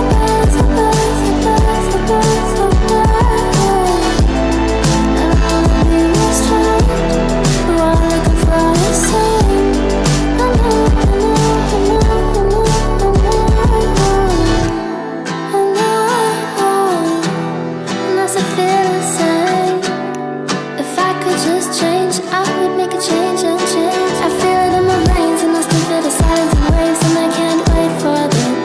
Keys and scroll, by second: 1.0 F8, 18.1 F8.